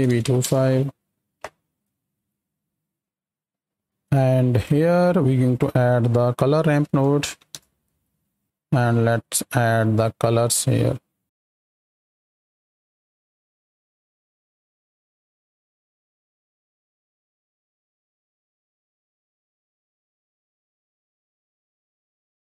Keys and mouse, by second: 4.0-4.6 drag, 8.6 middle click, 9.5 middle click, 11.3-14.7 drag, 14.9 drag, 15.2 shift+click, 15.5-19.9 drag, 20.1 drag, 20.3 click, 20.6 click, 21.0 click, 22.0-22.5 drag.